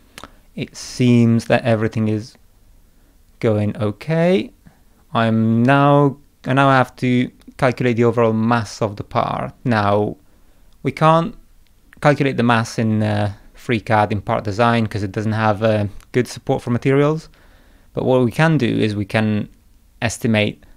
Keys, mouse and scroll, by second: 0.8 click, 1.4 middle click.